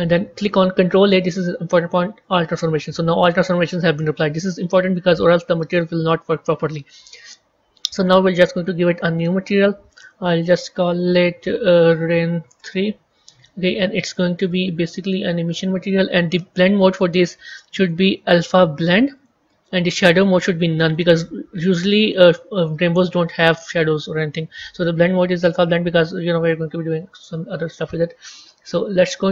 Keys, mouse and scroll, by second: 2.2 ctrl+a, 3.7-6.3 middle drag, 6.3 KP_1, 7.1-9.3 scroll up 3, 9.4-10.0 drag, 10.3 click, 12.4-17.5 drag, 17.5-17.9 scroll down 1, 19.1-29.3 drag.